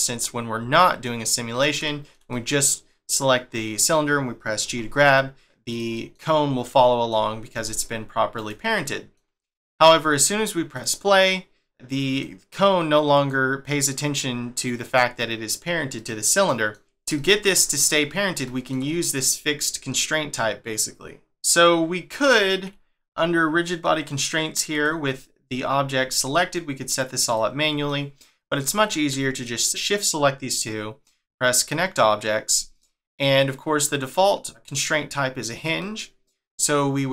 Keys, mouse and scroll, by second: 1.8 shift+middle click, 4.6 g, 5.9 middle click, 7.5 r, 8.7 middle click, 10.7 click, 11.7 click, 13.6 middle click, 16.0 middle click, 16.9 scroll down 1, 17.2 shift+middle click, 18.1 scroll up 1, 18.4 shift+middle click, 24.7 click, 27.2 click, 27.9 shift+middle click, 29.3 shift+click, 31.6 click, 32.8 middle click, 35.8 middle click.